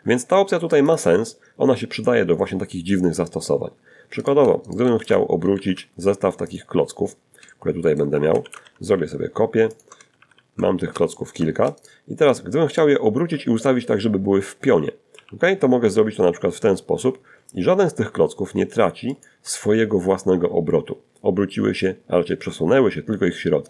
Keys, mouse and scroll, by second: 2.4 shift+right click, 2.9 shift+right click, 3.3 shift+click, 3.3 shift+x, 3.8 a, 4.7 shift+click, 5.1-5.4 scroll down 2, 5.6 shift+middle click, 5.8 shift+click, 6.4-7.3 typing, 7.9 ctrl+shift+click, 8.3 ctrl+shift+r, 8.9 ctrl+shift+middle click, 9.3 ctrl+shift+middle click, 10.0 shift+right click, 10.5 shift+right click, 10.9 shift+right click, 13.4 r, 17.3 ctrl+click.